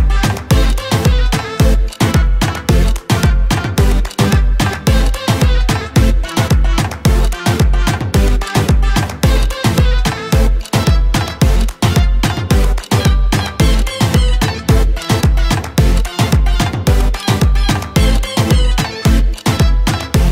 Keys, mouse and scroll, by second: 2.5 click, 12.9 click.